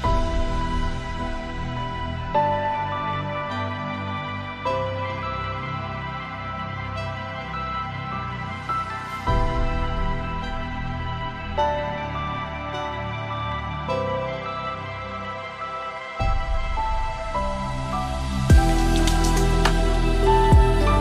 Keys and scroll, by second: 18.4 ctrl+shift+].